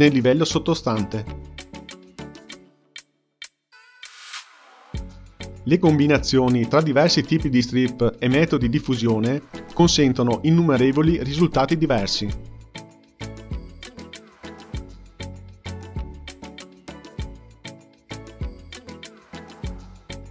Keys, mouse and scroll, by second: 0.6-3.8 drag, 5.4-6.1 drag, 6.2-8.8 drag, 9.1 click, 10.4-17.2 drag, 19.0-20.3 drag.